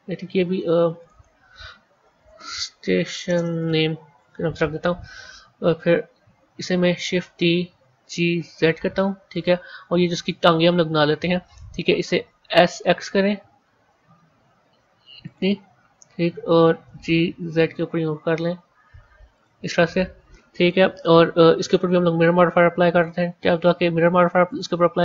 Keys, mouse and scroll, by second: 0.9 click, 1.0-2.3 drag, 2.3 t, 7.3 shift+d, 10.3 Tab, 12.4 s, 16.7 g, 21.5 click, 22.8-25.0 drag.